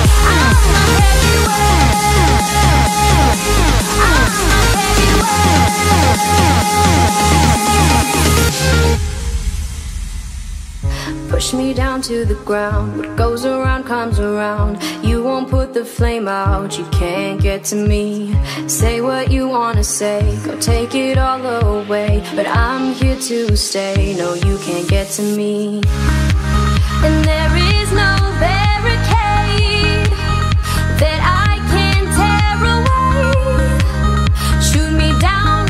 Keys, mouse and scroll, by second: 1.2 click, 2.1-3.6 drag, 3.6 KP_7, 5.2-6.9 drag, 6.9 KP_1, 8.2-11.0 drag, 11.0 KP_7, 12.6 click, 13.5-15.8 drag, 16.8-19.8 drag, 19.8 KP_1, 21.2 click, 23.2 click, 23.8-27.1 drag, 27.9 click, 30.3 click, 31.3-34.1 drag, 34.1 Tab.